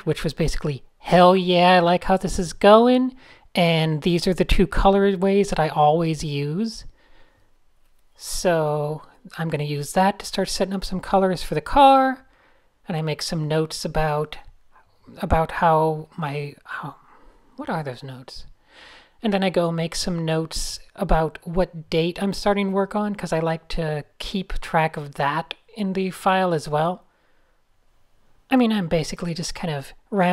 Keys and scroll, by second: 1.4 super+z, 3.2-4.4 typing, 14.1-16.0 typing, 18.0-18.8 typing, 22.9 Tab, 23.3 Tab, 23.5 alt+shift+super+r, 24.5-26.4 typing, 26.9 super+space, 27.1 super+space, 27.4 alt+super+l, 27.6-30.3 typing, 27.8 alt+super+l.